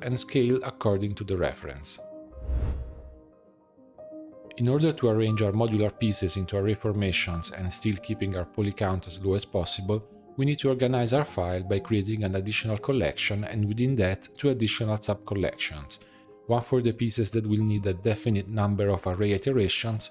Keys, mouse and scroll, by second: 2.9-3.8 middle drag, 3.8-5.4 right drag, 5.4 click, 5.6-8.7 drag, 10.8-12.4 right drag, 12.4-13.0 scroll down 1, 13.0 click, 13.2-18.2 drag, 18.2-19.4 right drag, 19.4-20.1 scroll down 2.